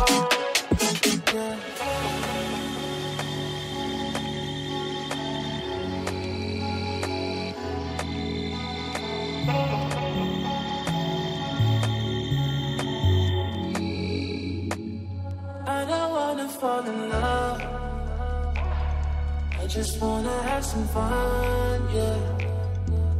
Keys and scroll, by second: 1.7 F4, 2.4 ctrl+r, 2.9 F3, 3.4 ctrl+r, 6.1 F3, 7.5 ctrl+r, 11.3 ctrl+r, 12.6 F3, 13.5 ctrl+r, 15.3 ctrl+g, 16.6 shift+F2, 23.0 F4.